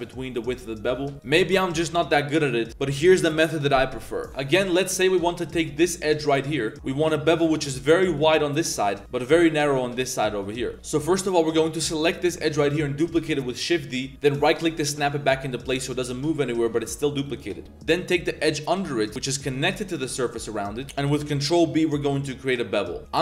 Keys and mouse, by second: 0.3 2, 1.1 click, 1.1 a, 1.1 g, 4.3 2, 4.3 z, 4.7 click, 5.0 z, 5.3 alt+click, 5.8 click, 6.1 z, 6.2 shift+click, 6.4 click, 6.7 ctrl+b, 8.5 drag, 8.8 ctrl+z, 9.1 ctrl+b, 10.7 click, 10.7 z, 10.9 click, 11.9 alt+click, 12.4 click, 13.0 shift+d, 14.9 click, 16.4 click, 16.7 g, 17.4 click, 17.7 z, 18.4 alt+click, 18.8 drag, 19.1 z, 19.9 g, 20.8 ctrl+b, 20.8 z.